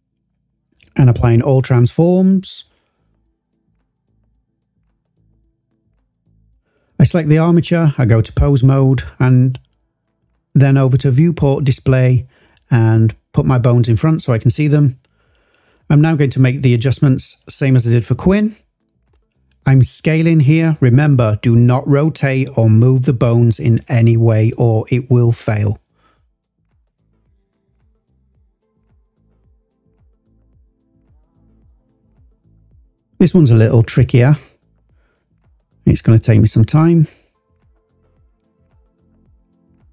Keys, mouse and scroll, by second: 0.3-2.7 drag, 3.2 scroll up 2, 4.0 click, 7.0 click, 8.0-8.5 drag, 9.9 click, 11.0 click, 13.7 click, 15.4 scroll up 1, 15.8 drag, 16.5 click, 18.6 s, 22.2 click, 23.3 g, 23.9 z, 25.9 click, 27.4 click, 28.9 s, 30.5 click, 31.6 ctrl+z, 32.0 ctrl+z, 32.3 ctrl+z, 33.2 click, 34.0 s, 35.3 click, 36.3 ctrl+z, 37.4 s, 37.6 x, 39.4 click.